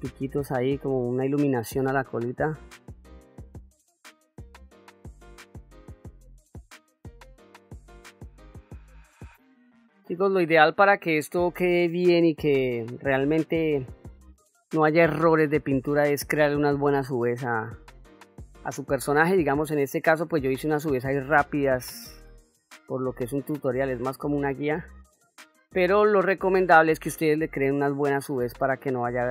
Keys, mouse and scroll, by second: 0.3 middle click, 1.4 click, 2.4-3.5 drag, 3.8 middle click, 4.7-6.4 drag, 6.5 middle click, 7.3-8.9 drag, 9.1 middle click, 10.7 shift+middle click, 12.0-13.3 drag, 14.4 middle click, 15.3 click, 15.9 middle click, 16.6 ctrl+middle click, 17.7 shift+middle click, 19.3-22.2 shift+f, 22.7-24.4 drag, 25.0 middle click, 26.8 click, 27.8-29.3 drag.